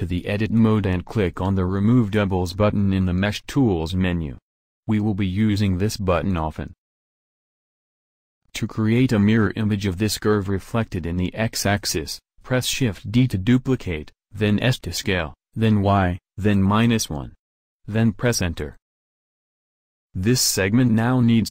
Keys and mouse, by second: 0.3-1.8 drag, 2.1-4.0 drag, 12.3 shift+d, 19.2-21.4 middle drag, 21.4 alt+Tab.